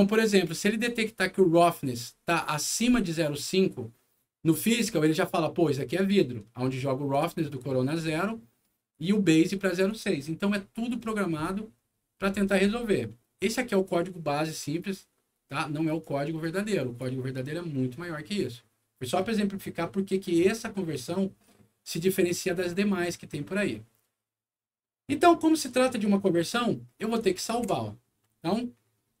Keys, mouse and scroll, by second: 2.4 click, 7.0 click, 8.8 click, 9.8 click, 10.4 scroll up 1, 10.9-11.8 scroll down 3, 12.0 scroll up 1, 12.4 scroll down 1, 12.6 scroll up 1, 12.9 scroll down 1, 13.4 scroll up 1, 15.8 right click, 16.6 click, 22.2 click, 23.4 middle click, 26.6 middle click, 27.5 ctrl+s, 29.0-29.2 typing.